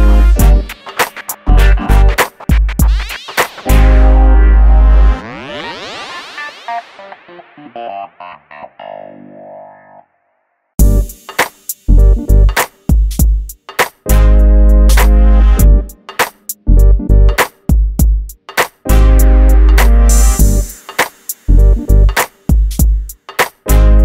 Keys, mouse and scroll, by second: 0.2 click, 1.1 right click, 2.6 click, 3.1 right click, 4.4 click, 4.9-5.4 scroll down 1, 5.4 click, 6.2 Delete, 6.6 middle click, 7.3-8.0 scroll up 1, 8.0 click, 10.7 x, 12.3 click, 13.3 f, 13.5 click, 14.5 click, 15.6 g, 15.9 click, 17.0 right click, 18.7 click, 20.7 x, 21.5 click, 22.4 f, 23.5 middle click.